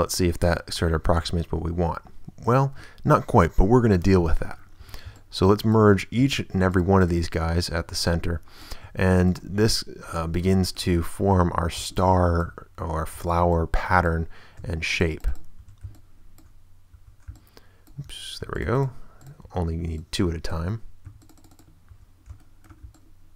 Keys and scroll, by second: 4.8 shift+a, 5.5 ctrl+a, 6.2 ctrl+w, 6.9 w, 7.7 a, 9.1 ctrl+w, 9.6 a, 10.4 shift+a, 11.5 shift+a, 13.1 ctrl+a, 14.7 ctrl+w, 15.2 w, 15.6 a, 17.2 ctrl+a, 18.4 ctrl+w, 19.1 w, 19.7 a, 20.4 ctrl+a, 21.0 ctrl+w, 21.6 w, 21.9 a, 22.8 ctrl+shift+a.